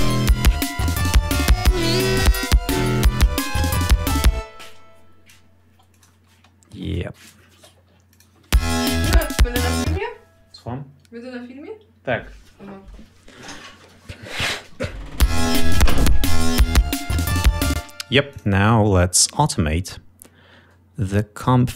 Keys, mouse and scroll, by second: 1.3 click, 1.6 click, 2.3 click, 3.0-5.5 drag, 5.9 click, 6.3 space, 7.2-8.5 drag, 8.5 space, 10.0 space, 15.3 l, 17.9 space, 18.5 click.